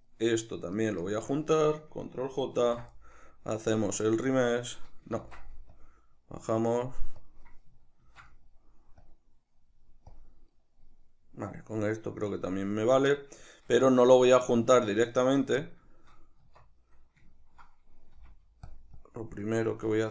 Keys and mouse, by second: 0.0 right click, 0.8 shift+right drag, 1.0 shift+right click, 2.7 ctrl+j, 4.3-10.9 drag, 5.3 ctrl+z, 8.1 ctrl+z, 10.9-12.7 middle drag, 12.7 right click, 13.1-15.0 middle drag, 15.0 right click, 15.6-18.7 shift+middle drag, 16.4 Tab, 18.2 f, 19.0-20.1 drag.